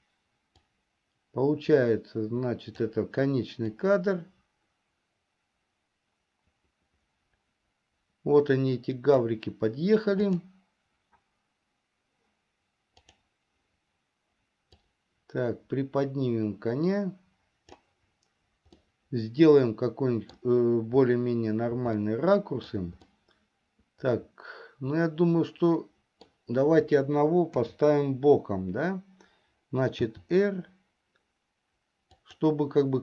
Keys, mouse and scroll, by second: 0.7-3.4 drag, 4.6-9.8 drag, 10.8 click, 15.4-18.7 drag, 19.5-20.9 middle drag, 22.5-26.8 shift+middle drag, 28.0 KP_7, 30.5 r.